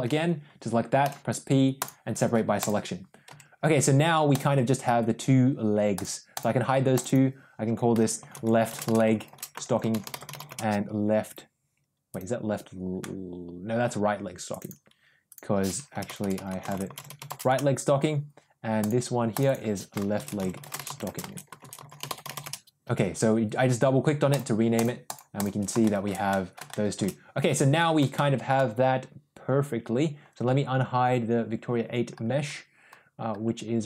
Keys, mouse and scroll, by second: 0.9 p, 3.2 Tab, 4.2 click, 5.8 click, 6.2 click, 7.0-11.0 drag, 11.2 click, 12.9-13.7 middle drag, 14.4 click, 14.6-18.0 drag, 15.9 BackSpace, 19.2 click, 19.4-22.8 drag, 24.2 click, 24.6 click, 25.0 click, 25.2 click, 25.7 shift+middle drag, 26.2 middle drag, 26.6 shift+middle drag, 28.0-28.4 shift+middle drag.